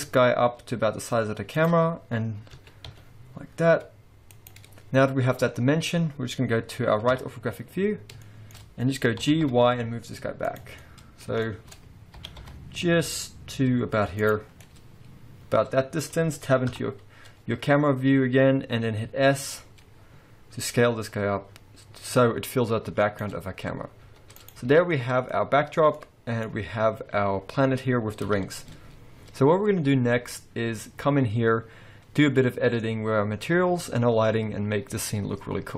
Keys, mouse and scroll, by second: 1.9-2.2 scroll up 2, 2.7 s, 5.5-7.2 scroll down 3, 7.2 KP_3, 7.8-8.3 scroll down 7, 8.3 shift+middle click, 9.3 g, 10.8 scroll down 1, 10.8 middle click, 11.5 shift+middle click, 12.2 g, 14.5-15.2 scroll down 4, 14.7 middle click, 16.9 KP_0, 17.6-19.1 scroll up 3, 19.1 s, 23.6-24.1 scroll down 1, 24.1 s, 24.7 alt+a, 25.0 middle click, 25.4-26.0 scroll down 2, 26.0 middle click, 26.0 scroll down 3, 28.3 KP_0, 29.1-30.2 scroll up 3.